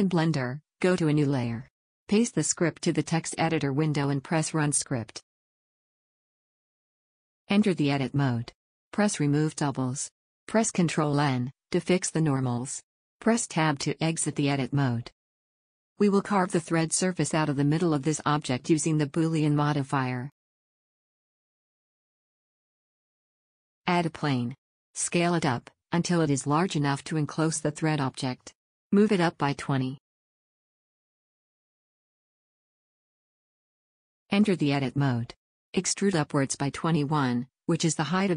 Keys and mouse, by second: 2.3 click, 2.9 ctrl+a, 4.2 ctrl+v, 5.2-7.4 drag, 8.3 Tab, 12.3 ctrl+n, 13.6 KP_1, 14.5 Tab, 15.2 shift+c, 19.8 KP_1, 24.1 shift+a, 26.1 s, 27.9 s, 29.2 s, 32.3 g, 35.7 Tab, 37.1 e.